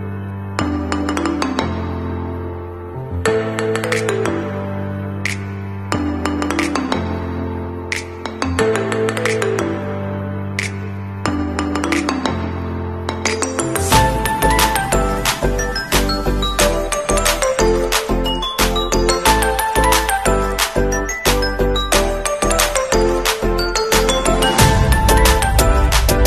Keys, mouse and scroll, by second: 0.4 click, 3.3 shift+3, 4.8-6.1 typing, 7.8-9.6 typing, 11.1 ctrl+a, 12.2 click, 23.1 KP_0, 23.4 Return, 25.1 click.